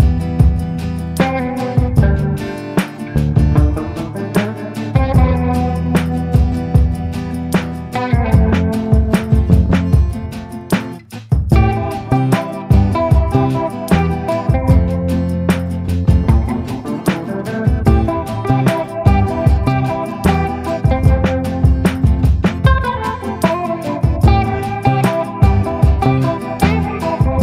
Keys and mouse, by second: 0.2 click, 0.6 ctrl+z, 0.9 click, 1.5 ctrl+z, 1.6 click, 2.0 ctrl+z, 2.2 click, 3.2 ctrl+z, 4.0 ctrl+z, 4.4 ctrl+z, 6.6 click, 7.1 click, 7.8 click, 9.0 ctrl+z, 9.6 ctrl+z, 10.4 [, 10.7 [, 10.9 click, 11.5 ctrl+z, 11.6 [, 11.8 click, 12.2 ctrl+z, 12.4 ], 12.5 click, 12.8 click, 15.0 click, 15.1 click, 15.6 ctrl+z, 16.0 click, 16.7 [, 16.9 click, 17.4 ctrl+z, 21.4 click, 21.8 ctrl+z, 22.8 click, 23.4 click, 23.8 click, 24.5 ctrl+z, 24.9-26.3 typing, 25.4 click, 26.3 click, 27.2 ctrl+z, 27.3 [.